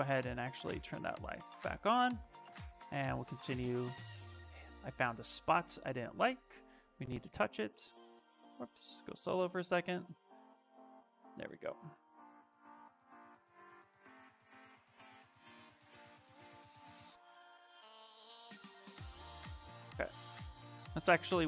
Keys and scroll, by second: 0.8 s, 2.9 s, 20.9 s.